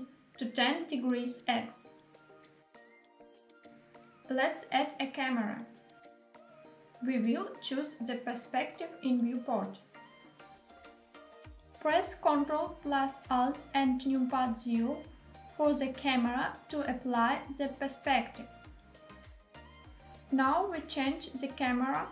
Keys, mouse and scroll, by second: 0.1 click, 3.8 shift+a, 7.1 KP_1, 8.7-10.1 scroll up 2, 10.2-11.4 shift+middle drag, 14.9 ctrl+alt+KP_0, 18.9 g, 20.0 z.